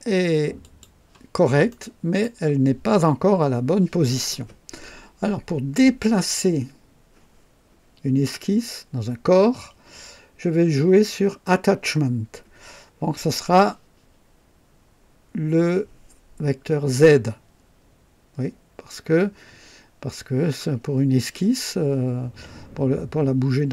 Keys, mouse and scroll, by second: 0.6 click, 1.7-2.4 right drag.